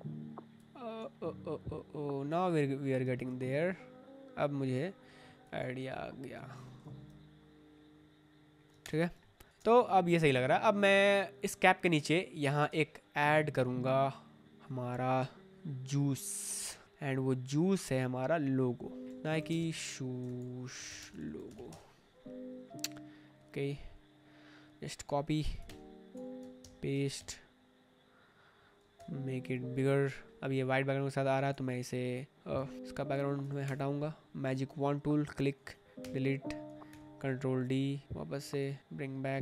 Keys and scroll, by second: 6.7 ctrl+t, 8.8 Return, 9.5 space, 12.7 alt+Tab, 19.0-21.8 typing, 25.7 alt+Tab, 26.5 ctrl+b, 27.1 ctrl+v, 28.8 ctrl+t, 31.0 Return, 32.7 ctrl+t, 33.5 Return, 36.0 Delete, 36.8 ctrl+d.